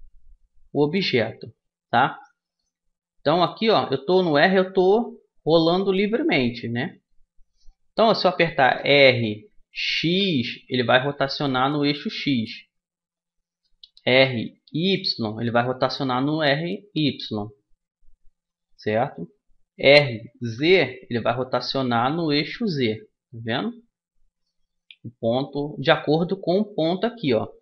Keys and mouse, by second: 8.5 r, 13.7 r, 19.5 r.